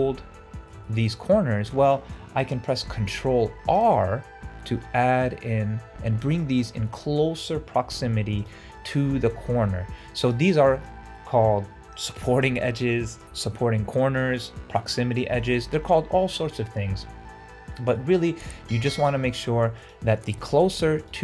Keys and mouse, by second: 0.7 shift+middle click, 1.7 shift+middle click, 2.9 ctrl+r, 7.7 ctrl+r, 17.9 middle click, 18.3 2.